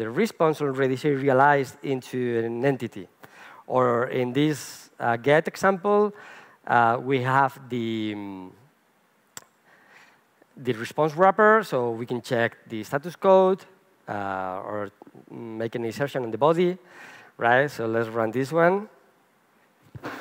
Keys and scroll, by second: 18.8 ctrl+shift+r.